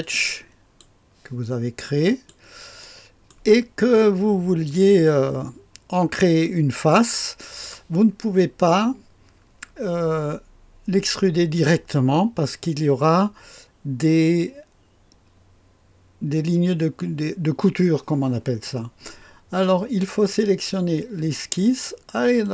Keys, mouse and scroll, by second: 0.0 click, 0.9 click, 2.1 click, 2.8-3.8 right drag, 5.0-7.9 drag, 22.4 click.